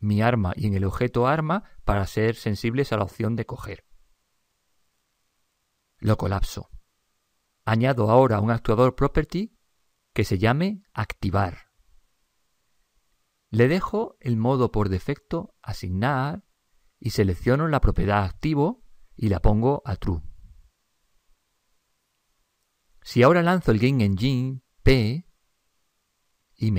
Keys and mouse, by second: 0.1 click, 6.8-8.1 drag, 8.1-11.5 middle drag, 11.5 click, 13.9 click, 17.6 click, 19.2-21.9 middle drag, 20.2 click, 24.7 click.